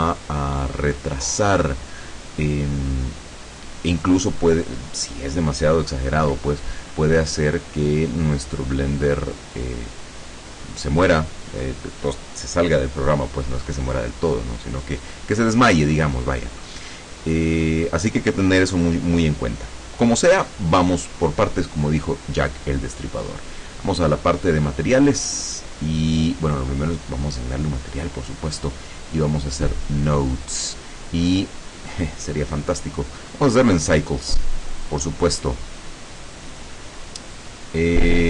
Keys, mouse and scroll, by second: 24.5 click, 26.6 click, 28.5 click, 31.6 click, 32.6 click, 33.7-34.3 drag, 34.8-35.7 drag, 36.6 click, 37.4 click.